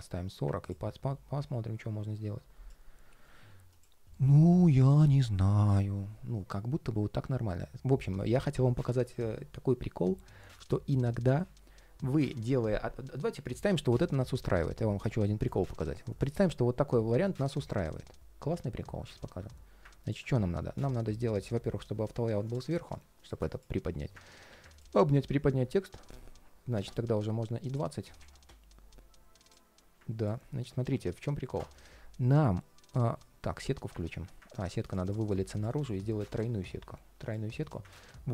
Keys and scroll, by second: 2.9 ctrl+shift+4, 4.3 ctrl+shift+4, 30.5 ctrl+shift+4, 32.8 ctrl+shift+4, 33.2 ctrl+shift+3.